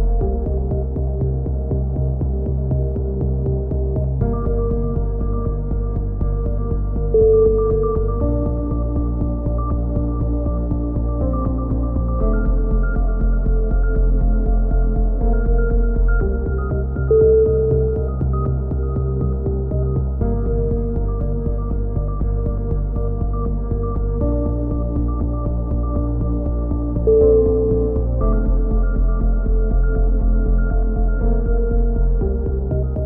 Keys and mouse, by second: 2.7 click, 2.7 right click, 2.8 KP_3, 3.1 click, 3.9 a, 4.0 z, 4.2-5.3 drag, 5.2 KP_1, 5.3 z, 7.2 click, 9.1 right click, 9.7 click, 10.5 a, 11.5 right click, 11.7 click, 12.5 KP_3, 13.0 a, 13.6 click, 13.6 right click, 14.2 a, 14.4 z, 15.0 click, 19.0 click, 19.0 KP_7, 19.4 z, 20.2 right click, 20.7 click, 21.6 a, 21.7 z, 22.4 z, 22.7 click, 23.8-25.0 drag, 23.8 right click, 25.1 click, 25.5 a, 26.2 click, 27.5-30.0 drag, 29.6 right click, 30.0 KP_3, 30.8 e, 31.2 click, 31.9-33.0 drag, 32.9 right click.